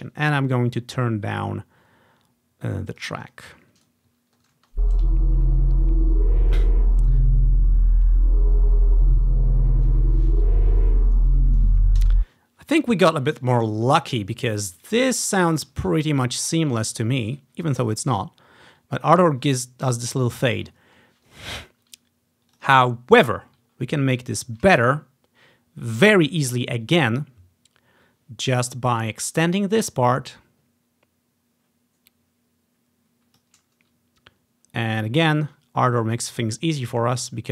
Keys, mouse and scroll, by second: 0.6-4.7 drag, 3.7-5.3 ctrl+scroll up 1, 4.7-5.3 typing, 12.1 space, 12.4-13.9 ctrl+scroll down 2, 15.2-16.4 ctrl+scroll up 5, 17.1 scroll up 1, 18.5 scroll up 1, 20.6-21.7 scroll down 3, 22.6 click, 23.9-25.0 scroll up 2, 28.7-34.6 drag, 35.4 ctrl+scroll up 1.